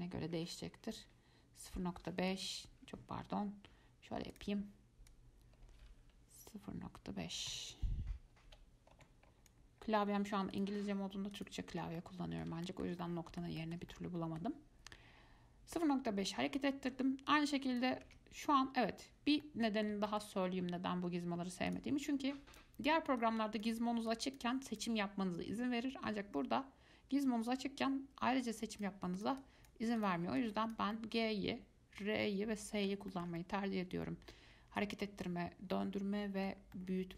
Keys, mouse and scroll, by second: 4.5 click, 5.3-8.3 drag, 12.2-17.5 middle drag, 17.5 click, 18.2 ctrl+z, 19.6-21.9 middle drag, 21.9 click, 23.4 click, 24.3 click, 24.9 click, 28.9 click, 29.4 click, 29.6 click, 30.2 click, 30.6 click, 31.1-36.6 middle drag, 36.9-37.1 middle drag.